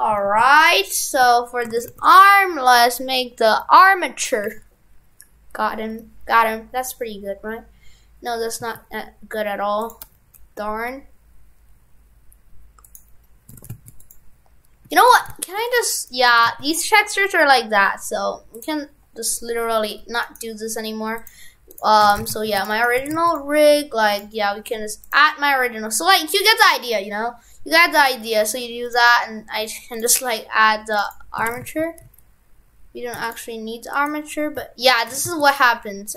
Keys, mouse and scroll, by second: 0.9 right click, 1.3 Tab, 1.7 shift+f, 2.4 right click, 13.5 shift+f, 14.9 Tab, 15.2 shift+f, 16.0 right click, 16.4 shift+f, 18.6 click, 20.3 right click.